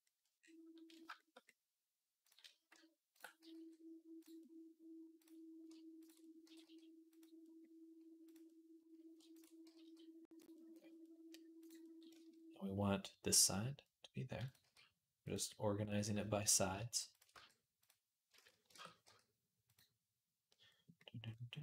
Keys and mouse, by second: 3.3 g, 5.0 click, 5.1-11.4 middle drag, 9.5 g, 11.4 click, 11.5-14.2 middle drag, 14.2 click, 14.3-16.9 middle drag, 14.5 g, 16.9 click, 17.0-20.8 middle drag, 17.1 g, 18.2 ctrl+z, 18.5 shift+Tab, 18.8 g, 20.8-21.6 drag.